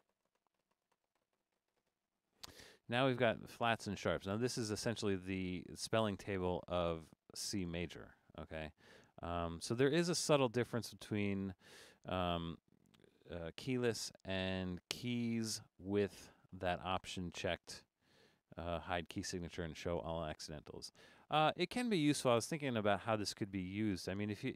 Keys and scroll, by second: 12.6 Escape.